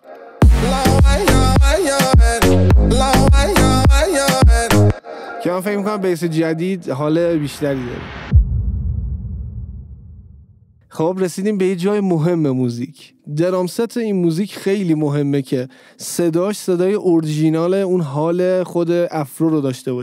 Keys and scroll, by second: 0.5 space, 4.9 space.